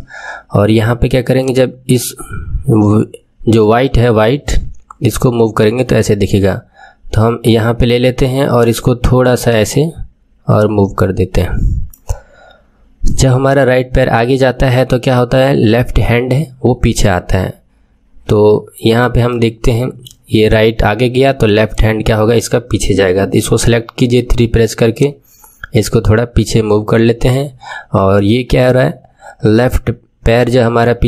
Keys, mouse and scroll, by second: 8.5 click, 9.6 click, 19.2-21.6 middle drag, 21.6 click, 23.9 KP_3, 24.9 click.